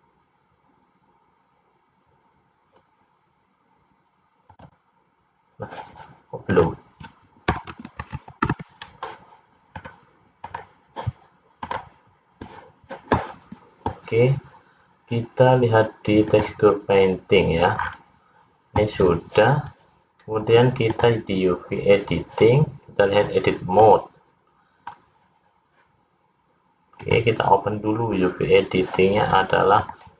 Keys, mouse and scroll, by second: 5.3 click.